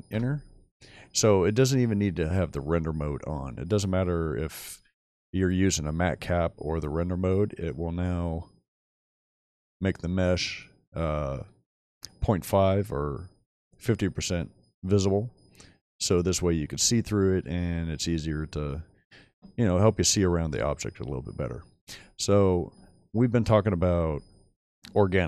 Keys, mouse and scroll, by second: 7.2 middle drag, 8.5-9.4 middle drag, 10.0-10.6 middle drag, 10.9-11.8 middle drag, 12.1-13.2 middle drag, 15.2-16.2 middle drag, 17.9-18.3 middle drag, 18.3-18.7 scroll up 4, 18.4 middle drag, 18.7 middle click, 20.6-21.3 middle drag.